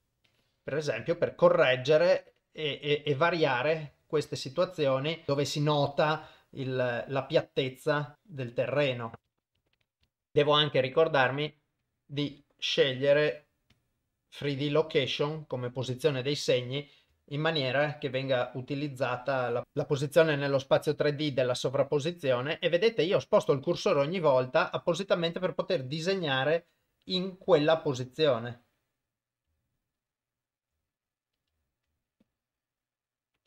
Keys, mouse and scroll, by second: 0.4 click, 2.4 click, 4.1 shift+right click, 4.8 click, 6.2 shift+right click, 6.6 click, 8.1 click, 9.2 shift+right click, 9.3 click, 9.6 shift+right click, 9.8 click, 9.9 click, 10.2 ctrl+alt+shift+click, 11.9 click, 12.3-12.6 middle drag, 13.0 middle click, 13.8-14.9 drag, 17.3 shift+right click, 18.0-20.3 drag, 21.2 shift+right click, 21.7 click, 25.7 shift+right click, 26.4-27.5 drag, 27.8 shift+right click, 28.4 click, 30.6 shift+right click, 31.7 shift+right click, 32.2 click.